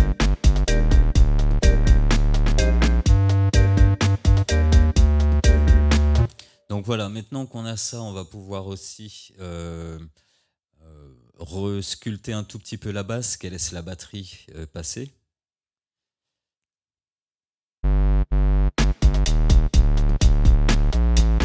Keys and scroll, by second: 6.3 space, 17.8 space.